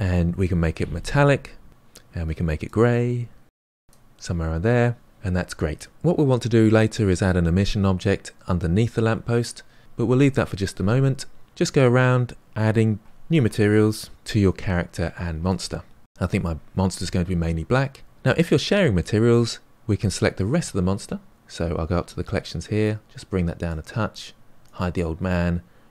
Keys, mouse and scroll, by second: 11.6 click, 12.2-14.0 drag, 15.1 click, 19.0-25.9 middle drag.